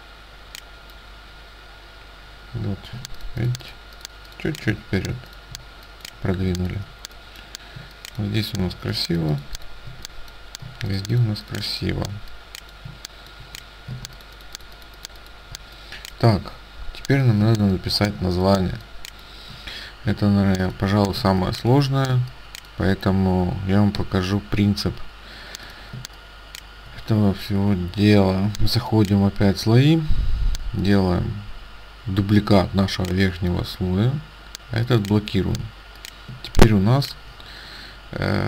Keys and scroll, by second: 3.0 ctrl+space, 14.0 ctrl+space, 17.5 space, 21.3 space, 22.1 space, 26.0 space, 36.4 space.